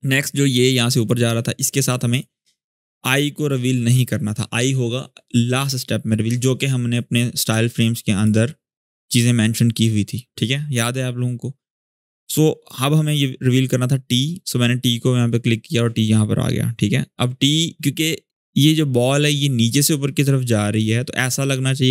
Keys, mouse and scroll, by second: 7.9 click, 14.5 click.